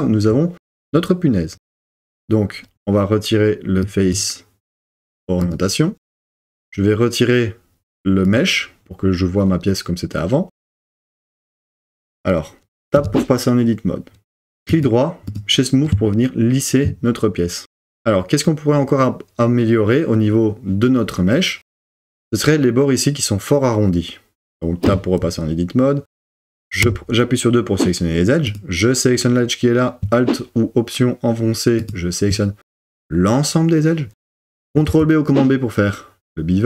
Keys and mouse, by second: 3.9-6.0 drag, 8.3 click, 12.9 Tab, 14.8 click, 24.9 Tab, 26.8 2, 34.9 super+b.